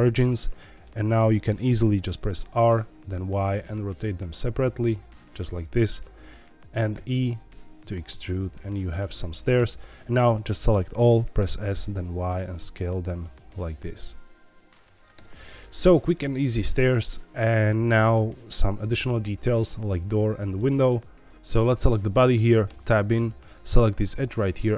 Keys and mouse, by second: 0.2 middle click, 2.5 r, 3.1 y, 5.8 click, 6.9 e, 8.9 click, 9.1 middle click, 10.0 a, 10.4 middle click, 11.3 s, 11.6 y, 14.9 click, 15.1 Tab, 15.3 middle click, 16.1 shift+middle click, 20.5 middle click, 22.0 click, 22.6 Tab, 23.5-24.7 drag.